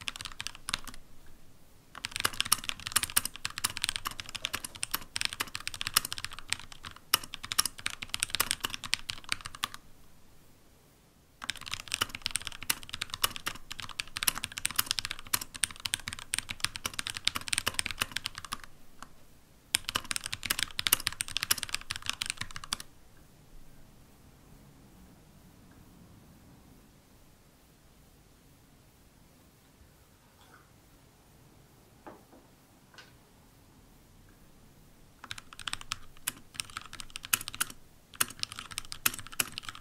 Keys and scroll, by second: 3.7-5.1 typing, 6.7 typing, 12.8 Down, 13.5 Right, 13.8 Left, 14.1 Down, 14.3 Right, 14.5-17.0 typing, 18.0-18.7 typing, 19.8 typing, 23.5 typing, 24.9 typing, 26.3-27.0 typing, 35.1-39.8 typing.